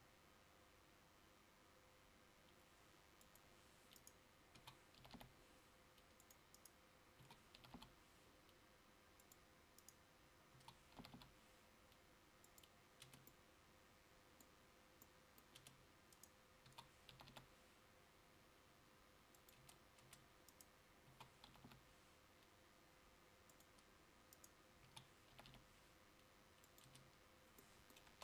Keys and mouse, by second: 7.4 s, 13.3 Tab, 15.7 Tab, 16.7 s, 19.7 Tab, 20.1 Tab, 21.2 s, 27.0 Tab.